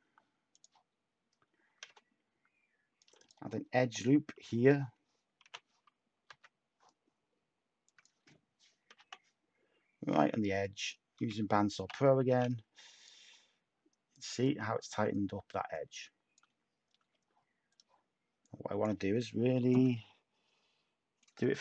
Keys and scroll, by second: 5.4-6.7 typing, 8.7-9.4 typing, 11.1-12.7 typing, 16.9 Tab.